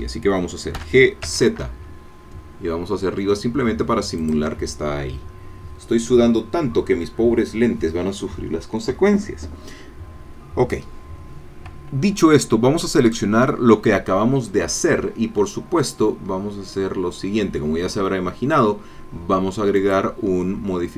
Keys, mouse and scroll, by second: 0.7 g, 1.2 z, 4.2 shift+click, 13.0-14.9 drag, 19.8 click.